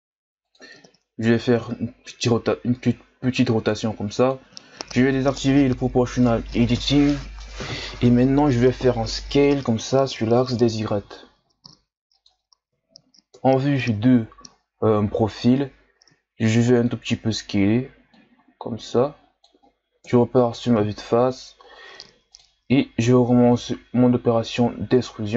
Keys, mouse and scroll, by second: 2.0 r, 6.1-9.1 drag, 9.9 s, 13.3 KP_3, 14.8-15.1 ctrl+scroll up 2, 16.7 click, 17.3-18.1 scroll up 2, 18.1-20.0 drag, 20.0 KP_1, 21.2-22.3 ctrl+scroll up 3, 22.3-23.4 drag, 23.4 e.